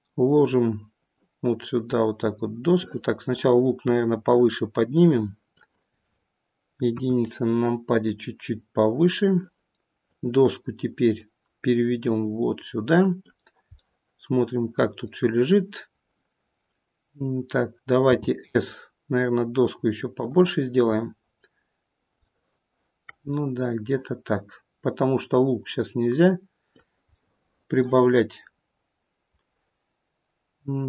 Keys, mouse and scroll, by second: 3.9 click, 4.6 click.